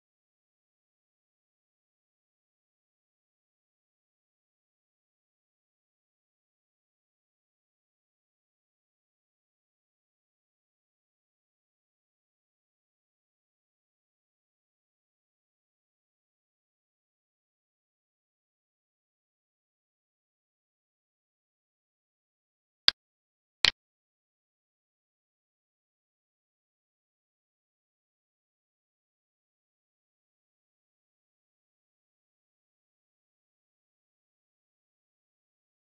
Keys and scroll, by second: 10.3 ctrl+Left, 24.2 space, 24.5 space, 34.1 alt+e.